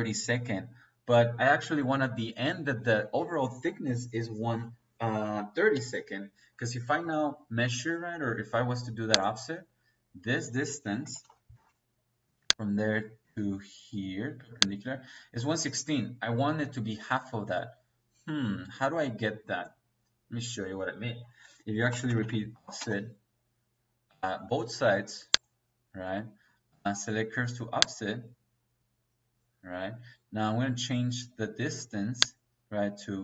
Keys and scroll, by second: 10.8-11.4 typing, 21.8 o, 22.1 f, 22.7 space.